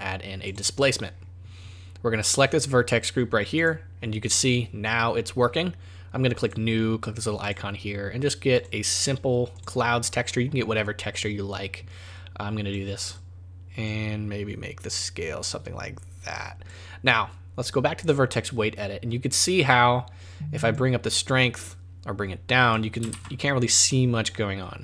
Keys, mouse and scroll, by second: 1.1-2.3 scroll down 12, 2.3 click, 6.4 click, 7.4 click, 8.6 click, 12.7 click, 13.9 click, 18.0 click, 20.7 click, 23.1 ctrl+z.